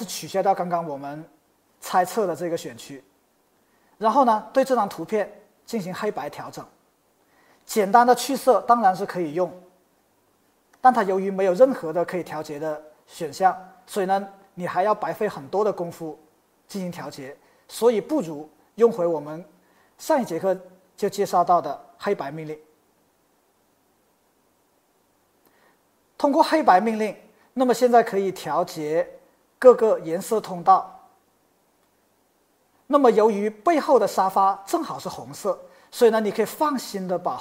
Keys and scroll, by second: 0.3 super+d, 8.8 shift+super+u, 18.0 super+z.